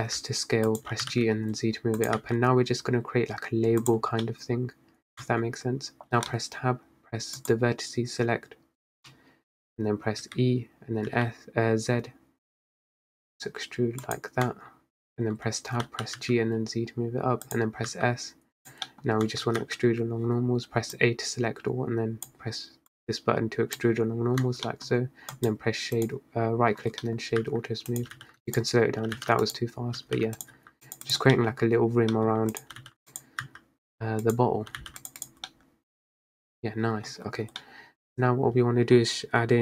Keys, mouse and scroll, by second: 1.0 g, 2.2 s, 4.3-5.3 middle drag, 5.3 Tab, 7.5-10.3 drag, 10.3 e, 14.5 Tab, 16.0 g, 18.0 s, 18.9 middle click, 19.2 scroll up 1, 19.4 Tab, 19.7 a, 21.0 click, 23.0-24.6 drag, 24.6 Tab, 24.8-25.4 middle drag, 25.4-27.1 right drag, 27.1-27.5 middle drag, 27.5 s, 28.1 g, 29.2 g, 30.1 g, 30.7 s, 31.2 click, 31.5 middle click, 31.7-32.0 scroll down 2, 32.2 middle click, 32.6 click, 32.8 g, 33.5 s, 34.8 g, 35.3 click, 35.6-37.2 middle drag, 37.2-37.7 scroll down 2, 37.7-38.2 middle drag, 38.2-39.6 scroll up 1.